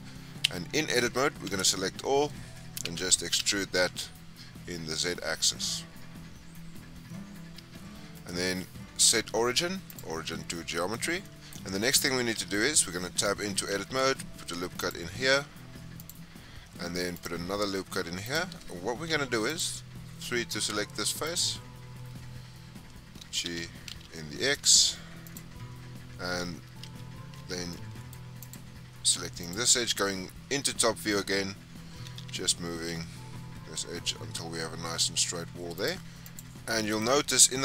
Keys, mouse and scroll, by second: 0.3 Tab, 1.4 a, 2.8 e, 7.5 Tab, 8.1-10.4 right drag, 10.4 scroll down 1, 10.4-12.3 middle drag, 12.3 Tab, 13.5 ctrl+r, 16.8 ctrl+r, 19.0 3, 19.4 click, 21.2 click, 23.1 g, 25.5-26.8 scroll up 5, 26.8 1, 27.3 2, 27.6 middle click, 28.3 click, 29.3 click, 29.9-30.6 scroll down 4, 31.8 g, 36.0 middle click, 36.0 scroll down 3, 36.2 click, 36.7-37.6 middle drag.